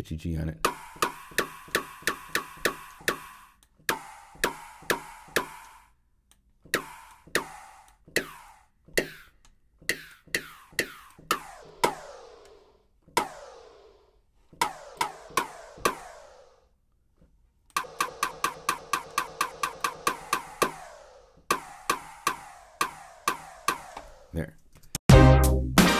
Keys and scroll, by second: 24.7 0, 24.9 Return.